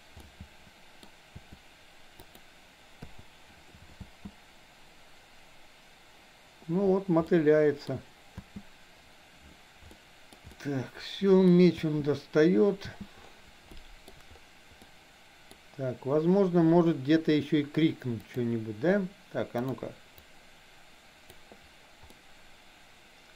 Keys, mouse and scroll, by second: 0.2 middle click, 1.2 r, 3.0 i, 4.1 space, 7.2-8.0 middle drag, 8.4 space, 10.0-10.4 shift+middle drag, 10.5-11.4 middle drag, 11.9 space, 13.7-14.1 middle drag, 14.7-15.5 middle drag, 18.2 click, 19.6 click, 20.2-21.5 drag, 22.1-23.3 middle drag.